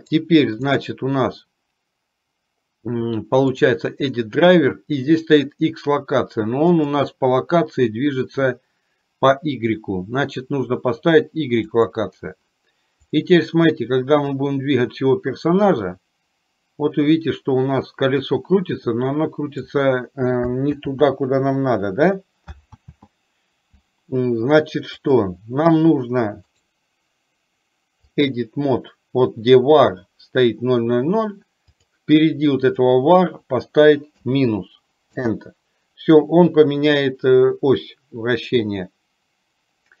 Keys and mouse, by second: 0.8-12.4 right drag, 13.2 click, 14.4-19.8 drag, 20.8 ctrl+z, 22.8 ctrl+click, 24.9 click, 26.7-40.0 right drag.